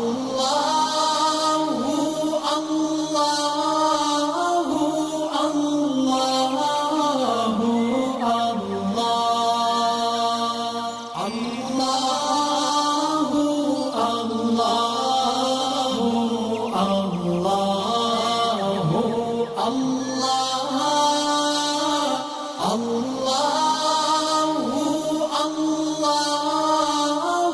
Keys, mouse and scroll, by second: 1.9 alt+scroll up 1, 3.6-5.1 drag, 9.3 alt+scroll down 1, 10.2-10.6 alt+scroll up 2, 10.6-13.2 drag, 14.7-15.8 alt+drag, 17.2 ctrl+z, 18.1 ctrl+click, 18.5 alt+scroll down 1, 18.8 space, 18.8 click, 20.9 alt+scroll up 1, 23.7 click, 24.9 space, 25.0 click, 27.1-27.5 drag.